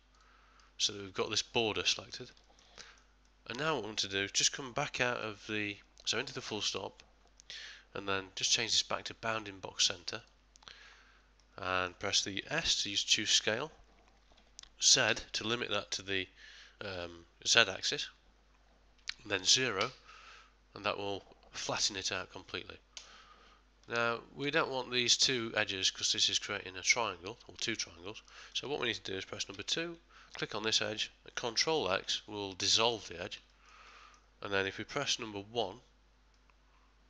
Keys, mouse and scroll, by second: 0.1 alt+click, 0.8 middle click, 2.4 ctrl+middle click, 2.8 shift+middle click, 3.3 middle click, 11.4 middle click, 12.6 s, 23.9 ctrl+middle click, 25.0 middle click, 29.5 ctrl+middle click, 29.5 2, 30.3 click, 31.9 ctrl+x, 32.7 middle click, 32.8 middle click, 33.2 ctrl+middle click, 33.5 ctrl+middle click, 33.9 ctrl+middle click, 35.6 1, 36.3 middle click, 36.7 middle click.